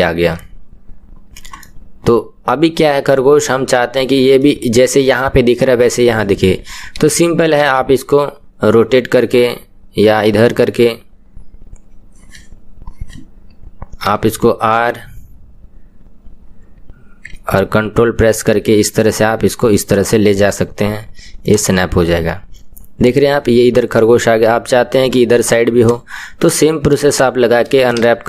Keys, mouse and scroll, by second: 0.3 KP_1, 1.6-7.6 middle drag, 7.6 r, 14.1 r, 22.0-25.9 middle drag, 25.9 click, 27.2 shift+click.